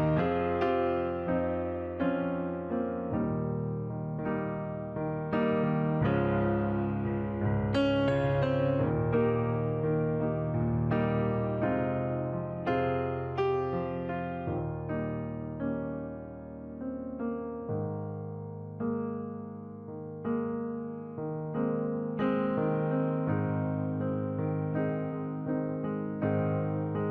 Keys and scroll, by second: 5.8 ctrl+t, 26.0 ctrl+u.